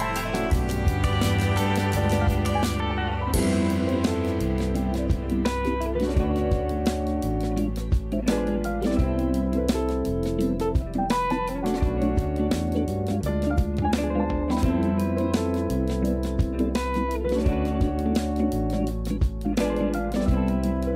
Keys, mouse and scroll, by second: 0.8 click, 1.7 shift+d, 2.4 s, 3.7 g, 7.9 a, 8.1 a, 8.4 scroll down 4, 8.7-10.2 shift+middle drag, 10.2-10.7 scroll up 3, 10.7 click, 11.2 ctrl+a, 16.8 shift+a, 18.1 ctrl+a, 19.8 click, 20.2-20.7 scroll down 3, 20.7-20.9 shift+middle drag.